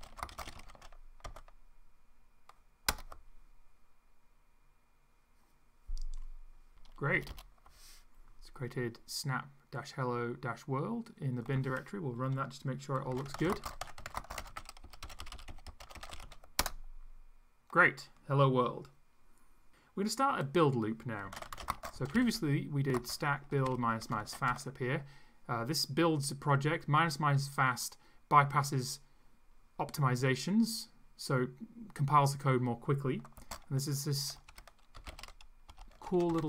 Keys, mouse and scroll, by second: 0.0-1.7 typing, 2.9 Return, 7.2 Return, 12.8-16.7 typing, 21.0-25.0 typing, 33.4-36.4 typing.